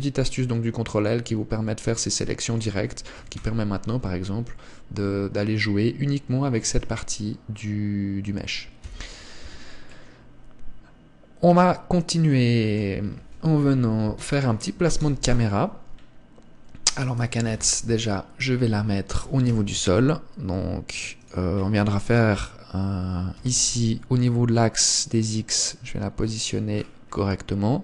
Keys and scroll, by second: 3.6 g, 9.8 Tab, 14.0 KP_1, 15.4 KP_0, 18.0 KP_1, 19.6 g, 23.8 g.